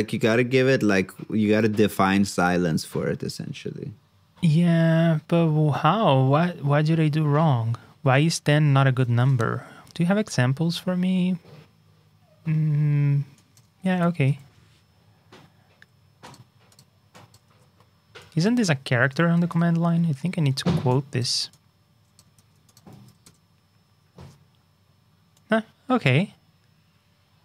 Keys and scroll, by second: 9.1 super+Tab, 14.0 super+c, 14.2 super+Tab, 17.5 super+v, 22.3 super+c, 22.9 super+v.